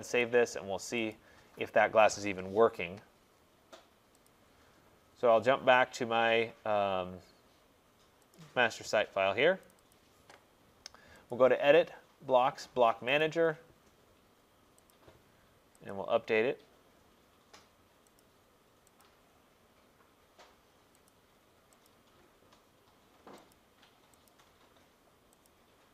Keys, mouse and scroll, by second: 0.3 click, 1.1 click, 4.3 click, 8.6 click, 9.8 click, 10.0 click, 11.4 click, 13.3 click, 15.0 click, 16.0 click, 18.3 click, 19.1 click, 21.1 click, 21.9 click, 23.6 click, 24.3 click, 25.5 click.